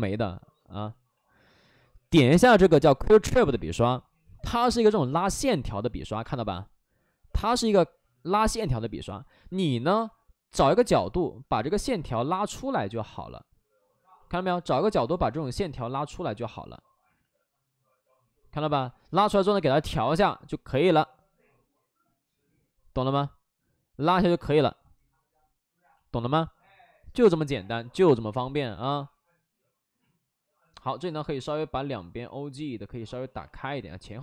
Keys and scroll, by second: 4.6 space, 5.9 ctrl+z, 6.2 space, 7.7 ctrl+z, 9.2 ctrl+z, 10.5 ctrl+z, 12.3 ctrl+z, 15.0 ctrl+z, 17.1 ctrl+z, 19.2 ctrl+z, 28.8 w, 32.5 w, 33.8 ctrl+z.